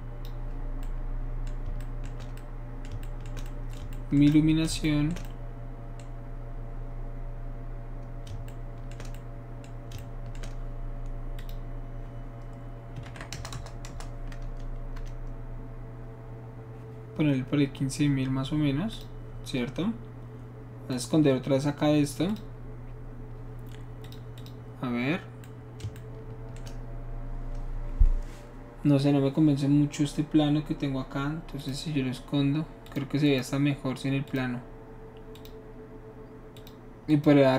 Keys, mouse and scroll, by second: 0.5-0.8 middle drag, 11.4 shift+click, 13.0-13.9 typing, 15.0 Return, 18.9 click, 20.9 click, 22.3 click, 24.0 click, 24.4 click, 31.6 click, 32.9 click, 33.3 click, 34.3 click, 35.4 click, 36.6 click, 37.1 click.